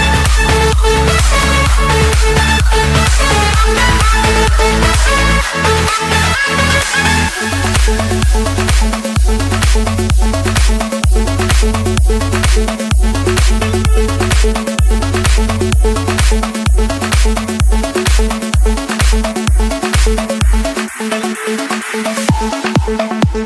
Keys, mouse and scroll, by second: 6.2-7.4 drag, 12.1 click, 13.5-14.7 drag, 16.3-17.4 drag, 22.6 click.